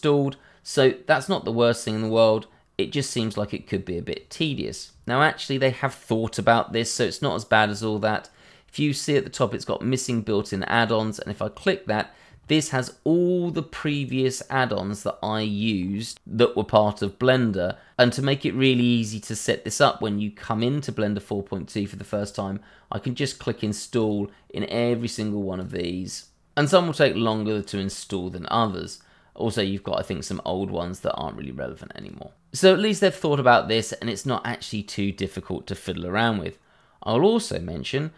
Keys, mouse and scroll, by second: 2.7 scroll down 1, 3.2 scroll up 1, 11.2 click, 14.2 scroll down 1, 15.8 scroll up 1, 18.2 scroll down 1, 18.5-19.2 scroll up 1, 19.2 click, 24.1 click, 25.3 click, 26.7 click, 28.4 click, 30.8 click, 31.5 click, 32.5-33.1 scroll up 1, 34.7 click.